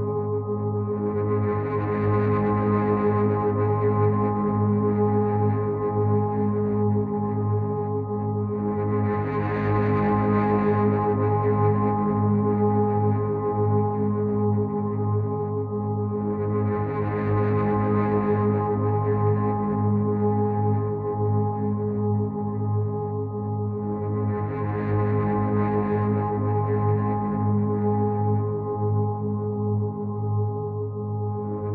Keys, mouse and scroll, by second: 3.8 alt+click, 6.2 click, 10.5 click, 14.5 alt+click, 18.1 click, 24.1 click, 26.4 click, 28.7 alt+click.